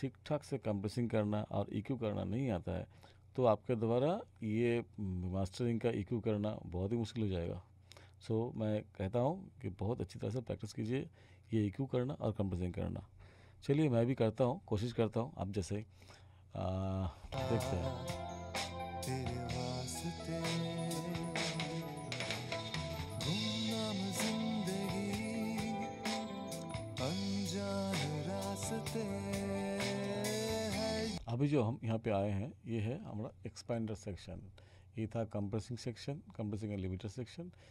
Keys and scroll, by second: 17.3 space, 31.1 space.